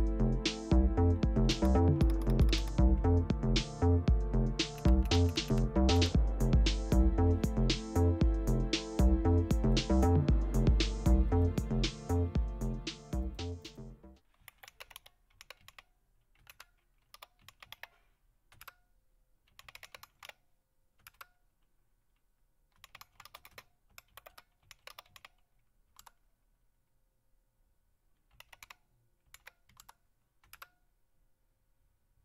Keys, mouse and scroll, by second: 1.5-2.5 typing, 4.7-5.4 typing, 9.7 click, 11.8-14.2 drag, 14.2-18.1 typing, 18.6 Return, 19.3-20.7 typing, 21.0 Return, 22.5-25.9 typing, 28.1-30.5 typing.